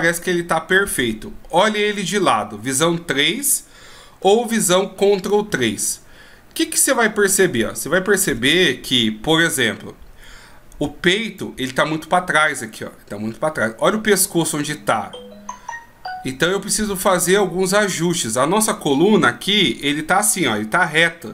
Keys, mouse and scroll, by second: 2.7 KP_3, 5.7 ctrl+KP_3, 8.2 KP_3, 11.5 right click, 14.4 right click, 19.6 d, 20.0 click.